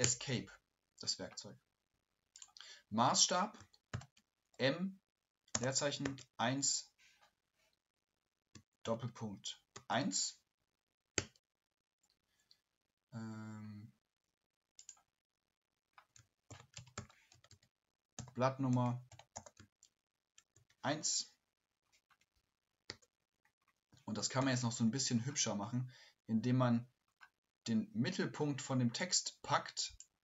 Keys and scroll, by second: 3.6-3.9 typing, 8.5-9.7 typing, 16.2-21.1 typing.